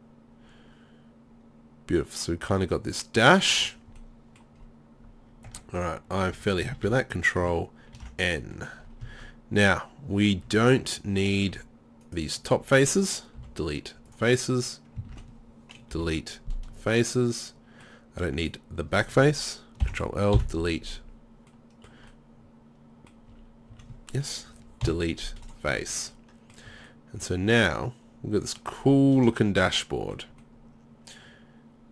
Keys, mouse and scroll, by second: 4.6 middle click, 5.1 middle click, 5.5 Tab, 5.8 middle click, 6.0 middle click, 6.4 Tab, 6.7 a, 6.9 a, 8.0 ctrl+n, 8.9-10.0 middle drag, 10.2 click, 10.5-12.0 drag, 10.5 z, 12.1 click, 13.4 Delete, 15.1 ctrl+z, 16.0 Delete, 19.8 ctrl+l, 20.4 Delete, 21.5 middle click, 21.8 middle click, 23.3 z, 23.7 z, 24.8 Delete, 25.7 z, 26.0 middle click, 26.7 Tab.